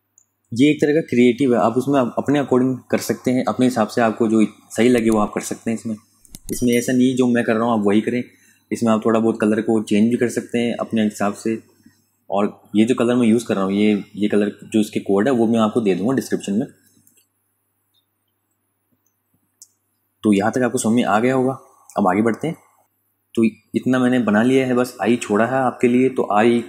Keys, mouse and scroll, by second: 0.3 click, 7.6 click, 18.1 space, 18.4 click, 18.8 ctrl+click, 22.8 d, 23.9-24.5 typing, 25.5 typing.